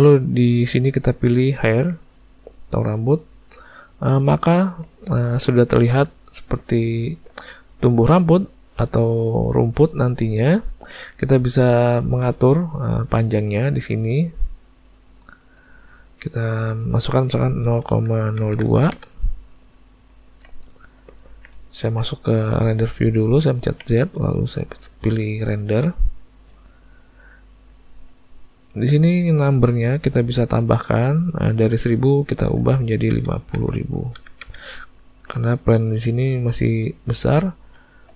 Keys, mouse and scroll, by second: 1.9 click, 3.5 middle click, 4.6 shift+middle click, 5.1 ctrl+middle click, 5.7 shift+middle click, 6.1 ctrl+middle click, 6.7 middle click, 7.1 shift+middle click, 7.6 ctrl+middle click, 9.5 middle click, 10.1 ctrl+middle click, 15.3 click, 20.1 ctrl+middle click, 20.7 shift+middle click, 21.2 ctrl+middle click, 21.6 shift+middle click, 23.8 z, 30.6 click, 34.4 KP_0, 36.2 middle click, 37.1 shift+middle click, 37.5 ctrl+middle click, 37.9 shift+middle click.